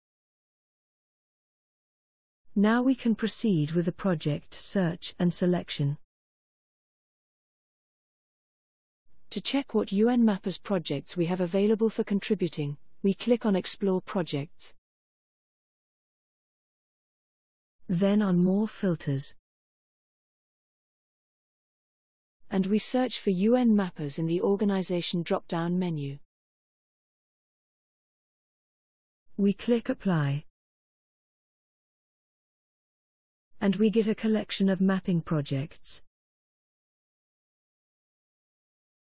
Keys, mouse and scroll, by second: 1.1-2.5 scroll up 1, 14.5 click, 18.7 click, 22.4 click, 24.1 u, 24.4 n, 27.5 click, 30.3 click.